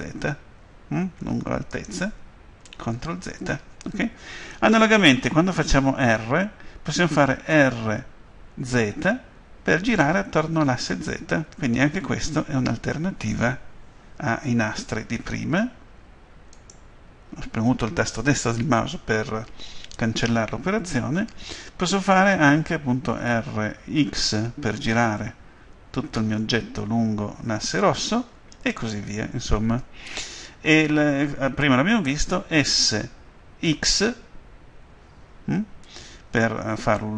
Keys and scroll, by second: 3.0 ctrl+z, 7.4 r, 8.7 z, 23.2 r, 24.1 x, 32.5 s, 33.7 x.